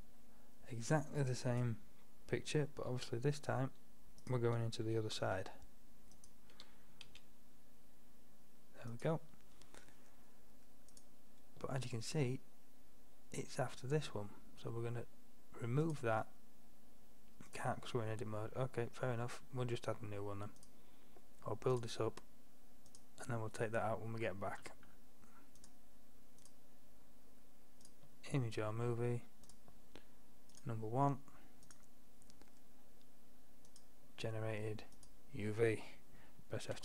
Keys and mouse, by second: 0.0-1.6 middle drag, 1.6 click, 2.9 s, 4.9 s, 6.6 g, 11.0-12.8 drag, 15.9-17.8 drag, 20.6-21.8 drag, 24.2-28.0 drag, 28.6-29.6 middle drag, 32.3-33.6 drag, 33.7 middle click, 33.8-36.8 drag.